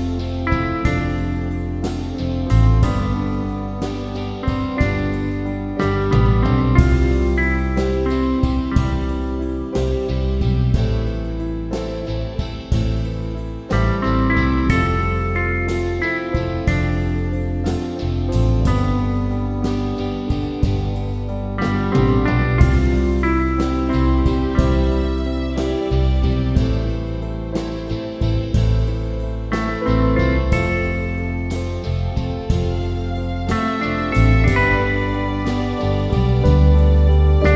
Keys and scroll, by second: 7.2 ctrl+z, 17.2 Return.